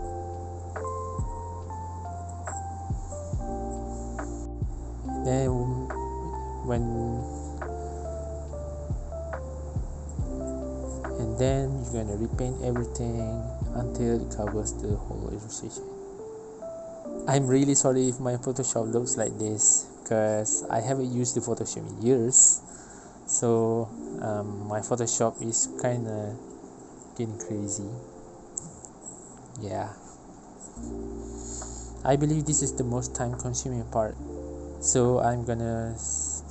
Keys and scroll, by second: 0.0-3.0 typing, 4.3 ctrl+alt+e, 5.0 BackSpace, 5.0 3, 5.5 ctrl+z, 7.7 Return, 7.7 BackSpace, 7.7 5, 8.6 ctrl+z, 9.7-15.1 typing, 10.5 Return, 10.6 ctrl+z, 12.3 Return, 14.3 ctrl+z, 16.3 typing, 17.6 ctrl+j, 18.6-20.6 typing, 21.7 typing, 22.8-25.4 typing, 26.6 Return, 31.1 e.